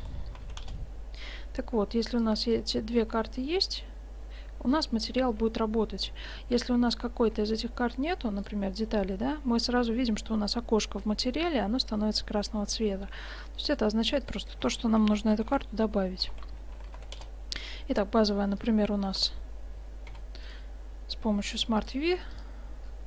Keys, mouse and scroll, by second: 2.2-3.2 drag, 3.1 Tab, 7.3 Tab, 8.4-10.2 drag, 13.7-16.3 drag, 18.6-20.1 drag, 19.1 Tab, 20.1 u, 22.9-23.0 middle drag.